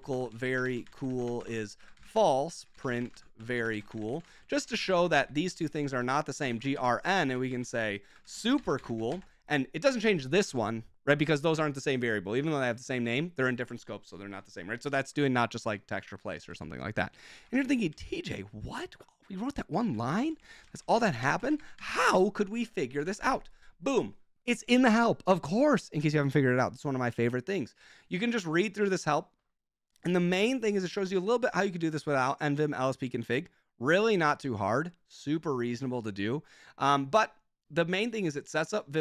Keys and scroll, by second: 0.0-9.5 typing, 16.5 Escape, 17.1-17.9 typing, 19.5-23.6 typing.